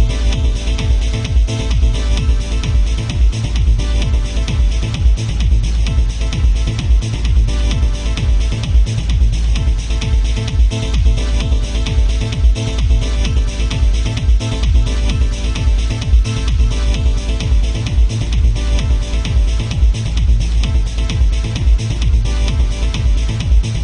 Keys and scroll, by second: 18.4 ctrl+z, 20.4 ctrl+z.